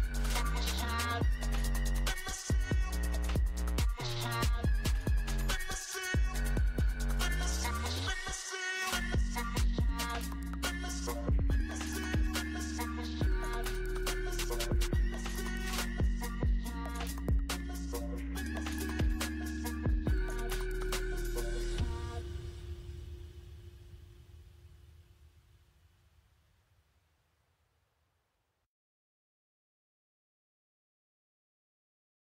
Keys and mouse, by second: 4.8-10.0 drag, 13.5-21.8 drag, 21.8 alt+m, 23.9 f, 25.4-27.5 drag, 28.0-32.2 drag.